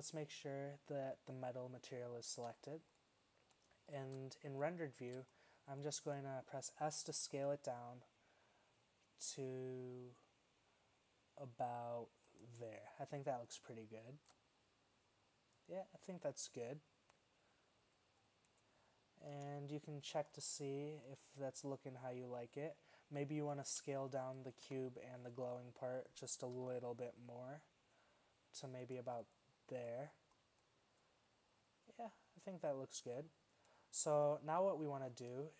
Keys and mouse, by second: 2.4 shift+z, 7.3 s, 12.9 middle click, 19.4 KP_0, 20.4 middle click, 23.7 right drag, 24.8 KP_1, 26.6 s, 34.1 middle click, 34.6 z.